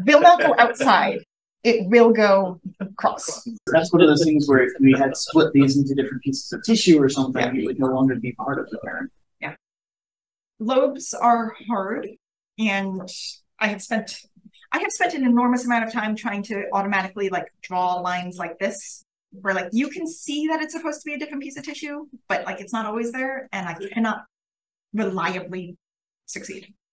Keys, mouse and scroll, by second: 0.1-0.4 drag, 1.3 click, 1.7-2.3 scroll up 1, 2.3-4.1 scroll down 1, 4.1-5.9 scroll down 1, 5.9-7.1 scroll down 1, 7.1-7.9 scroll down 1, 7.9-9.0 scroll up 2, 10.1 click, 12.9-13.2 drag, 19.6-20.4 scroll down 1, 20.4-21.2 scroll up 1, 21.2-21.5 drag, 21.2-21.5 scroll up 1, 23.5 drag, 24.1-25.7 scroll up 1, 25.7 scroll down 1, 26.3-26.9 scroll up 1, 26.7 click.